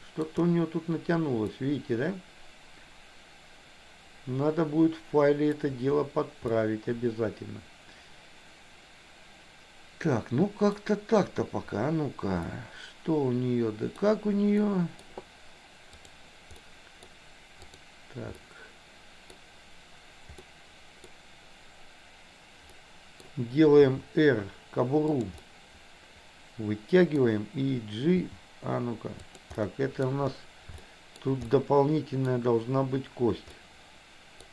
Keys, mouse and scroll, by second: 0.0 shift+middle click, 1.5-5.4 middle drag, 6.5-10.8 middle drag, 12.5-14.0 middle drag, 14.7 middle click, 15.9 click, 16.6 middle click, 17.7 click, 18.5 middle click, 20.5 middle click, 22.7 middle click, 23.9 r, 25.3-27.2 middle drag, 28.1 g, 29.6 middle click, 30.8 middle click, 31.5 middle click, 31.5 scroll up 1, 33.5-34.5 middle drag, 33.5 scroll up 1.